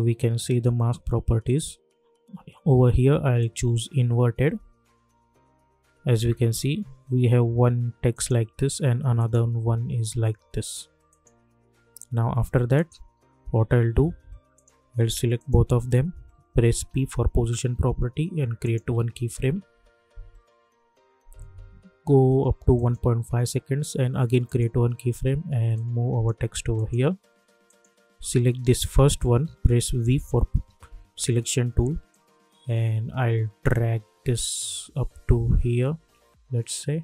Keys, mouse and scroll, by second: 3.3 click, 8.1 click, 9.2 click, 13.4 u, 14.5 click, 15.4 shift+click, 16.7 p, 18.6 click, 20.2 =, 20.5 =, 22.7 click, 29.9 v, 32.1-37.0 drag.